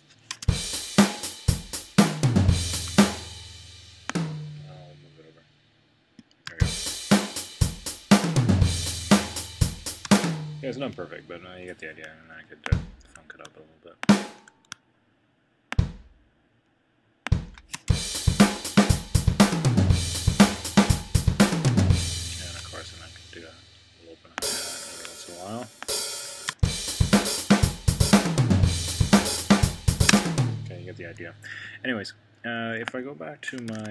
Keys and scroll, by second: 33.7 super+2.